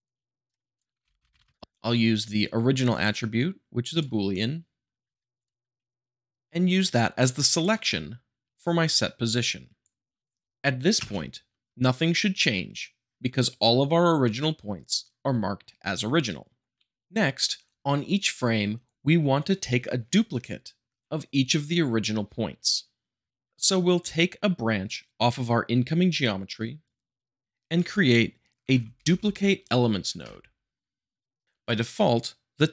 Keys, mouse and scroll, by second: 0.5 right click, 0.6 middle click, 0.8 click, 1.0 r, 1.2 g, 1.4 Return, 2.9-3.9 drag, 5.4-5.9 drag, 7.9-8.9 middle drag, 8.9-9.9 drag, 10.4 space, 11.0 space, 28.6 d, 28.7 u, 29.0 p, 29.1 l.